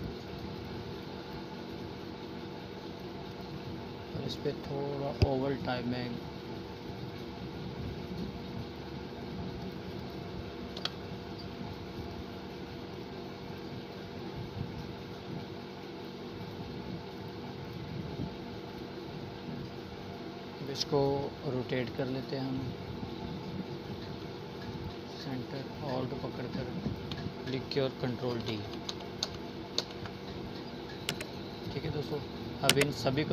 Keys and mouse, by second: 6.9 Delete, 9.1 right click, 10.6-12.2 drag, 20.8 click, 21.9-23.1 alt+drag, 24.2 ctrl+d, 27.6-29.6 drag, 32.0 click.